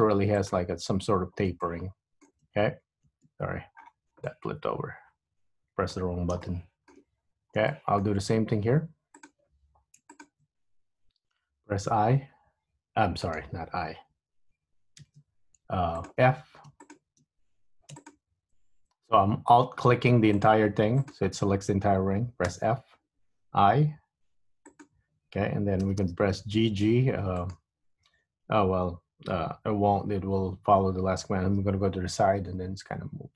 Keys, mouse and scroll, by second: 1.8 middle click, 3.7 scroll up 2, 3.9 scroll down 7, 4.5 middle click, 6.6 shift+middle click, 7.7-8.4 scroll up 4, 8.4 shift+middle click, 8.7-9.5 scroll up 1, 9.5 click, 9.5-10.1 scroll up 1, 10.2 alt+click, 12.6 i, 15.5 super+z, 16.1 shift+click, 17.0 shift+click, 18.1 alt+click, 20.5 click, 21.1 alt+click, 22.6 f, 23.6 i, 26.0 g, 30.4 KP_3, 32.2 g.